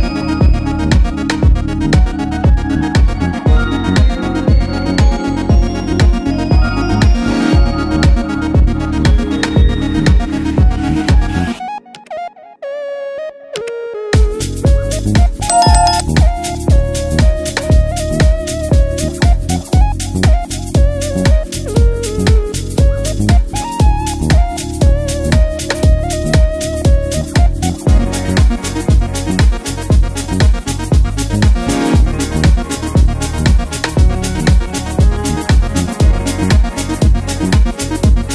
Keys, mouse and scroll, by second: 9.4-11.9 drag, 32.3-32.9 click.